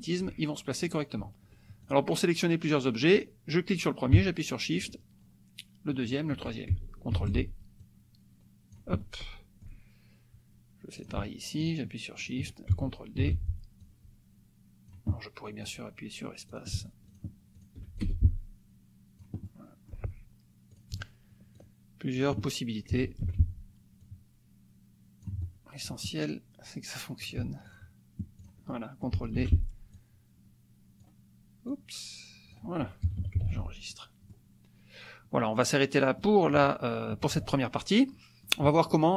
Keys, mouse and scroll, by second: 0.9 click, 1.8 shift+click, 3.1 click, 4.8 shift+click, 6.0 shift+click, 7.2 ctrl+d, 7.8-8.9 drag, 9.1 click, 11.1 shift+click, 11.6 shift+click, 12.2 shift+click, 13.2 ctrl+d, 13.8-15.1 drag, 15.1 click, 16.5 click, 17.1 shift+click, 17.6 shift+click, 18.0-19.4 shift+drag, 18.1 shift+space, 19.5 click, 20.7 click, 21.6 shift+click, 22.1 shift+click, 22.5 shift+click, 23.2 ctrl+shift+d, 24.0-26.0 drag, 27.2 shift+click, 27.7 shift+click, 28.4 shift+click, 28.8 shift+click, 29.4 ctrl+shift+d, 30.0-31.2 ctrl+shift+drag, 31.7 click, 33.0 KP_Subtract, 33.5 ctrl+s, 33.9 ctrl+click, 35.3-36.4 drag, 37.2 KP_Subtract, 38.2 click.